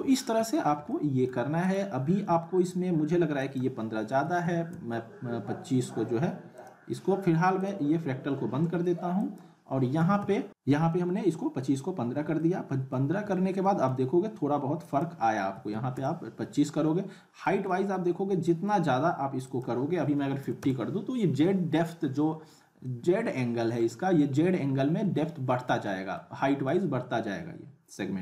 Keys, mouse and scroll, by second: 0.1-0.7 middle click, 0.7 scroll down 1, 0.9-1.5 alt+middle click, 1.6 click, 6.5 click, 12.4-13.0 alt+middle click, 13.2 scroll up 1, 13.3-13.9 alt+middle drag, 14.8 click, 17.4-18.5 middle drag, 19.4 click, 22.8 click, 22.8-23.8 alt+middle click, 23.8-25.2 scroll up 2, 25.2-25.7 alt+middle click, 25.9 scroll up 1, 26.1-26.8 alt+middle drag.